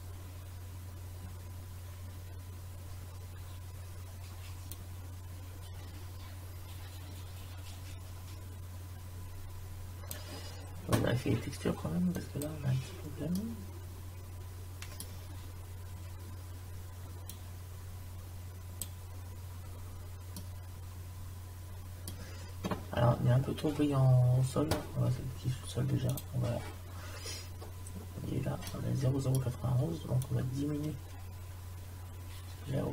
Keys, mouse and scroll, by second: 4.9 click, 12.2-13.3 drag, 13.3 middle click, 17.4 click, 19.5-20.0 scroll down 1, 26.1-27.8 drag, 27.8-28.8 middle drag, 30.3-31.7 drag.